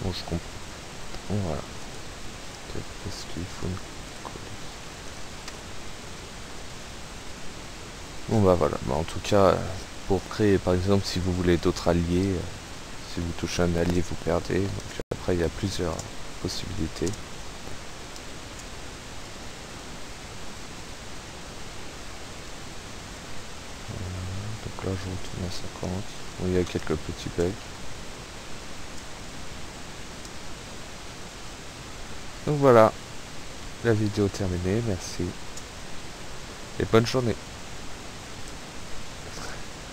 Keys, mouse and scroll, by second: 0.0 Right, 1.0 Escape, 2.0 right click, 3.4-3.8 scroll down 1, 4.0 click, 5.1 click, 11.3 click, 13.0 p, 14.3 Up, 14.9 space, 15.6 Up, 15.9 space, 17.1 space, 17.6 Right, 18.2 space, 18.6 Up, 18.9 Right, 19.3 space, 19.6 Right, 19.9 Up, 20.3 Right, 20.5 Up, 21.3 Right, 21.4 Up, 22.5 space, 23.3 Right, 23.5 Up, 24.0 Right, 24.4 Up, 25.3 Left, 25.6 Up, 25.9 Right, 26.3 space, 26.5 Right, 26.9 space, 27.3 Up, 28.3 Left, 28.4 space, 29.4 Up, 30.1 Left, 30.3 space, 30.4 Left, 30.8 Up, 31.2 Right, 34.3 Up, 35.4 Left, 37.7 Escape, 39.4 click.